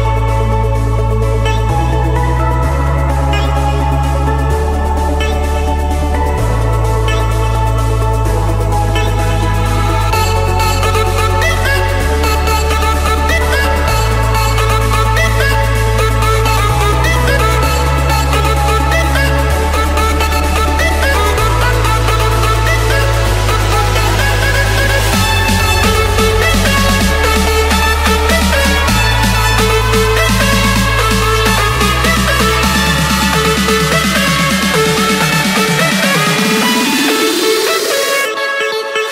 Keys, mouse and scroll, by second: 1.4 click, 1.7-2.6 scroll down 11, 3.0 click, 4.5-5.2 scroll up 5, 5.7 Escape, 5.7 scroll, 8.1 click, 10.0 click, 11.1-11.9 scroll, 11.9-12.3 scroll, 13.0 click, 13.8 click, 15.8 click, 17.4 typing, 18.9 Return, 19.7 middle click, 19.9 middle click, 21.3 middle click, 22.1 scroll, 23.1 Escape, 24.7 scroll, 26.2 click, 28.9-30.2 typing, 32.4 Return, 34.3 click, 34.8-35.1 scroll, 37.4 click.